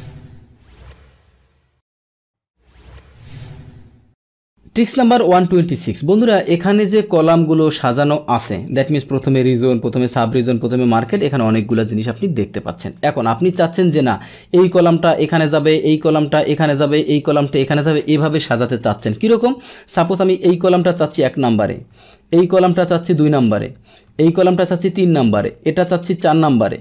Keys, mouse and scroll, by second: 4.9 alt+Tab, 6.1-8.2 drag, 8.6 click, 9.3 click, 10.0 click, 10.6 click, 11.0 click, 11.3 click, 11.7 click, 12.5 click, 14.5 click, 15.2 click, 15.7 click, 16.4 click, 17.0 click, 17.5 click, 20.0 click, 21.5 right click, 23.3 click, 24.1 right click, 25.2 click.